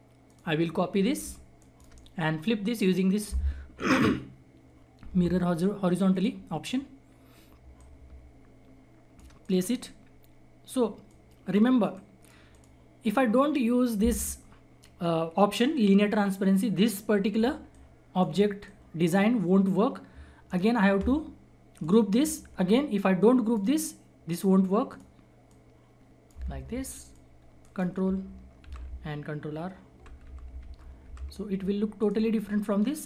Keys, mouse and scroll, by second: 0.2 click, 1.6 shift+right click, 6.1 click, 6.9 scroll down 1, 7.7-9.4 drag, 10.0-10.6 scroll up 1, 10.6-11.0 scroll down 1, 11.0 click, 12.9-14.7 scroll up 1, 16.7-17.4 scroll down 1, 17.6-20.4 drag, 20.4 right click, 21.8 click, 23.7-24.5 scroll down 1, 24.5-24.9 scroll up 1, 24.9-27.1 drag, 27.1 ctrl+click, 27.6 ctrl+right click, 28.6 ctrl+r, 31.2 ctrl+r, 31.5 scroll down 1, 31.9-33.0 drag.